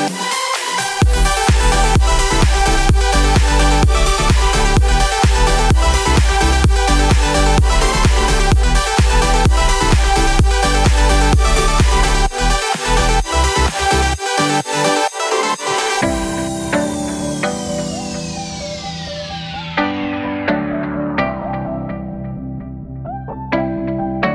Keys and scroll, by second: 0.8 ctrl+j, 5.5 ctrl+z, 6.2 ctrl+z, 8.4 ctrl+j, 15.0 ctrl+j.